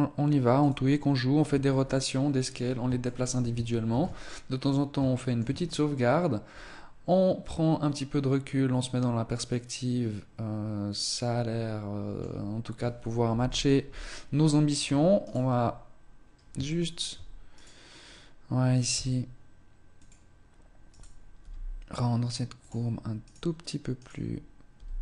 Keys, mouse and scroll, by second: 1.0 scroll down 1, 1.0 Tab, 3.0 shift+middle click, 3.5 ctrl+s, 4.5 scroll up 1, 5.0 shift+middle click, 5.4 middle click, 13.2 KP_1, 14.1 scroll up 2, 14.2 Tab, 15.2 right click, 16.6 shift+middle click, 17.4 right click, 18.8 s, 20.4 right click, 21.3 g, 22.6 click, 23.2 right click, 23.9 right click, 24.7 g.